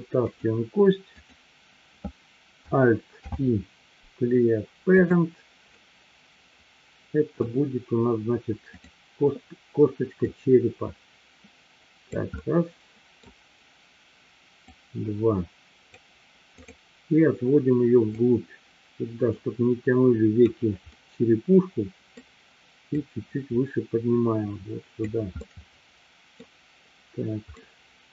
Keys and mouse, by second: 0.2 click, 1.1 click, 3.2 alt+p, 5.7-7.5 middle drag, 8.7 click, 10.4-12.1 drag, 12.5 middle click, 14.6-16.0 drag, 16.5 click, 18.2-20.5 drag, 21.0-22.1 middle drag, 23.0-25.1 drag, 25.5-26.5 middle drag, 27.6 middle click.